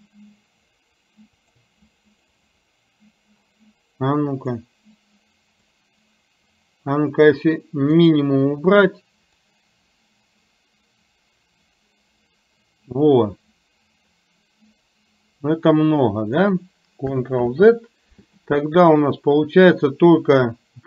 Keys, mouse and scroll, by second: 1.8 click, 2.2 click, 2.5 click, 4.6-5.7 drag, 8.1 click, 9.5-16.6 drag.